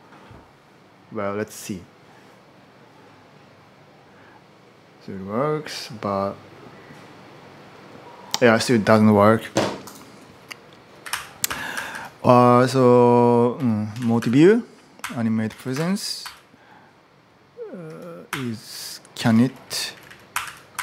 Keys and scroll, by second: 10.6-15.6 typing, 16.0 ctrl+u, 17.4-20.8 typing.